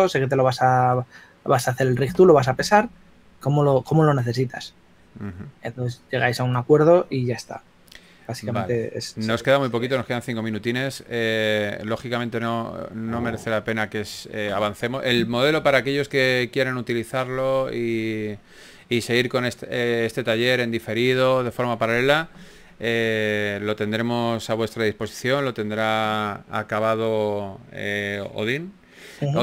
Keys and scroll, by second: 11.8 s, 14.4 4.